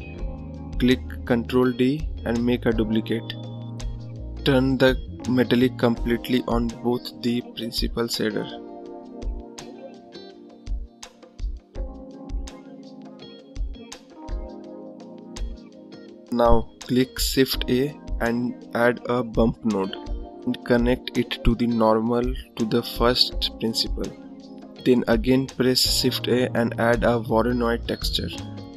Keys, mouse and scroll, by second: 1.2 click, 2.5 shift+d, 6.5 scroll up 1, 6.6-24.9 drag.